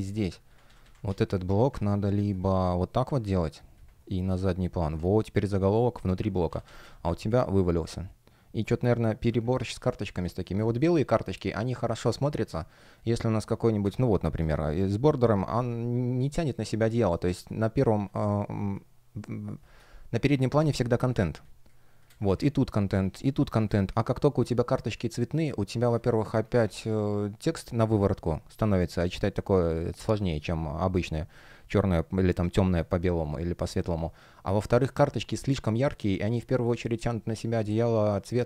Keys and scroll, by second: 0.3 super+z, 6.2 super+z, 7.1 space, 9.9 space, 12.1 space, 16.9 shift+p, 18.4 space, 21.0 space, 22.1 super+z, 23.5 space, 31.3 space.